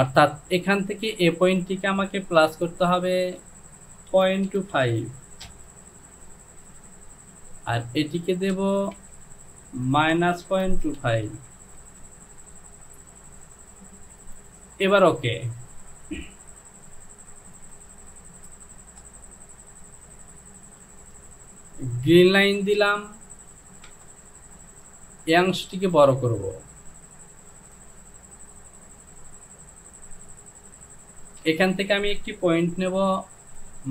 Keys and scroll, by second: 2.6 Down, 3.3 Down, 4.2 KP_Decimal, 4.5 KP_2, 4.8 KP_5, 5.5 Return, 8.5 Down, 9.0 Down, 10.0 KP_Subtract, 10.5 KP_Decimal, 10.9 KP_2, 11.2 KP_5, 11.6 Down, 23.9 Return, 33.4 Down.